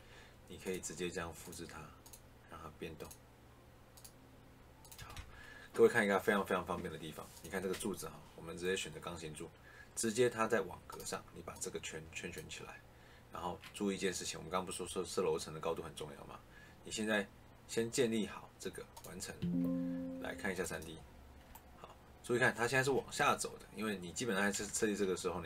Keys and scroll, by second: 4.8 Escape, 24.4 ctrl+z.